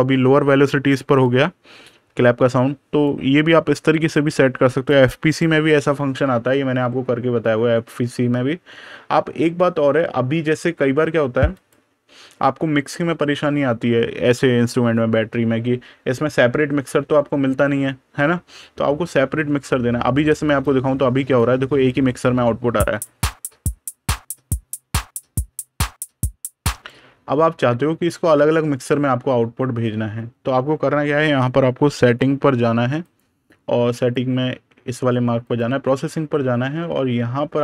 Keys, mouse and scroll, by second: 2.2 click, 11.4 click, 22.8 click, 26.6 click, 32.5 super+KP_Add, 32.9 click, 36.3 super+KP_Subtract, 36.8 super+KP_Add.